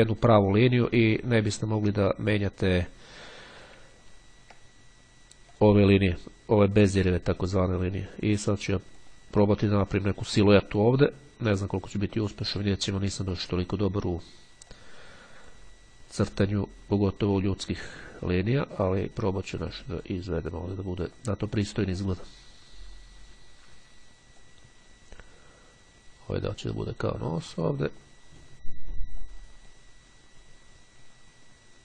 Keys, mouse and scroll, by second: 0.4-1.7 drag, 4.2-4.8 ctrl+scroll up 2, 5.7 click, 7.4-9.6 drag, 9.6-10.1 scroll up 2, 12.6 click, 14.9-16.2 drag, 16.3 click, 17.4-19.9 drag, 20.1 click, 22.1-25.0 drag, 26.6-27.7 drag, 27.8-29.0 drag, 29.4-30.4 drag, 30.6-31.4 scroll up 1.